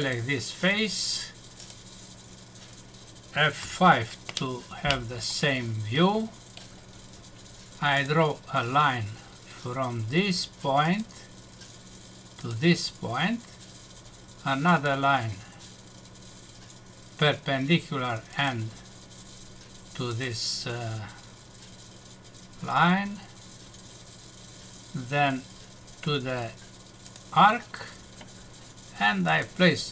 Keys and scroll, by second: 3.6 F5.